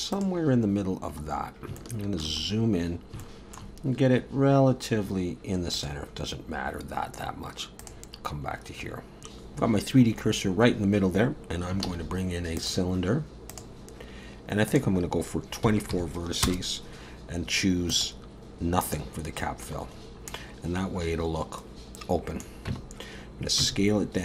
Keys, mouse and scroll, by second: 0.1 click, 1.4-1.7 scroll up 2, 1.8 shift+middle click, 2.5-3.1 scroll up 6, 3.2 shift+middle click, 5.8 click, 7.8 click, 8.3-10.1 scroll down 7, 8.8 Tab, 10.1 scroll down 4, 10.1 scroll up 2, 10.7-11.3 scroll down 1, 11.9 shift+a, 14.7 click, 17.9 click, 20.0-20.8 scroll down 2, 20.3 middle click, 22.7 Tab, 23.6 s.